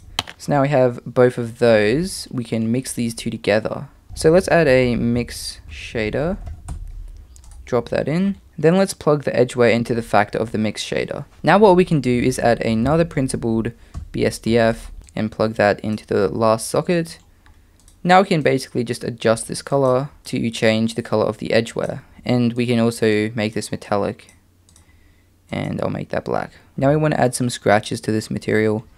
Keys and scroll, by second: 4.0 BackSpace, 4.5 shift+a, 4.8 m, 12.3 shift+a.